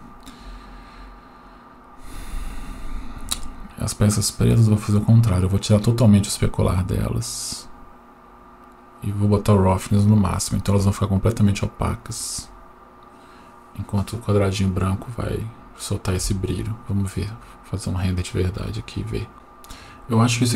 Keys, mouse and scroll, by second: 1.1-2.0 scroll up 6, 2.0-3.5 scroll up 2, 3.5 click, 4.2-5.2 scroll down 5, 6.3 click, 8.9-9.8 drag, 17.2 F12, 19.3 middle click, 19.3-19.7 scroll down 1.